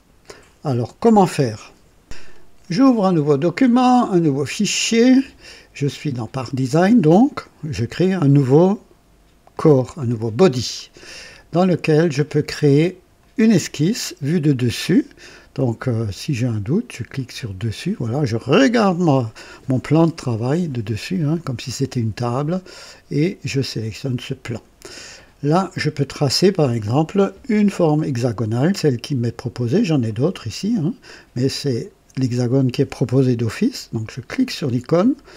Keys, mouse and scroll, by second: 4.4 click, 9.5 click, 13.1 click, 17.1 click, 23.6 click, 25.6-26.3 scroll down 2, 30.0 click, 31.0 click, 34.0 click.